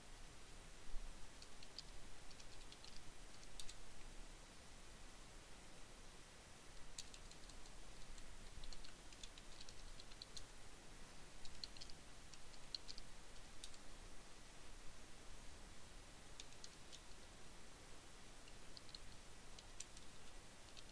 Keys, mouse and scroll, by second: 0.9-2.0 typing, 3.6 Return, 4.4 Up, 6.4 BackSpace, 8.5-12.1 typing, 10.3 Return, 16.1-20.1 typing.